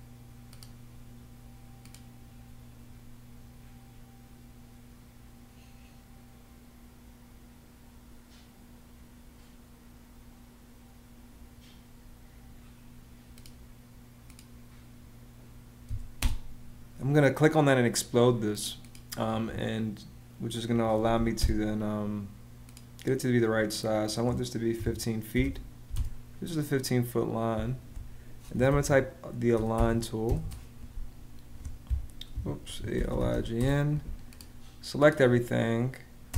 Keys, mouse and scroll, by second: 15.6 x, 15.9 space, 19.0 Escape, 20.4-21.3 typing, 24.2-25.6 typing, 28.0-30.5 typing, 32.0 Escape, 32.2-33.4 typing, 36.0 space.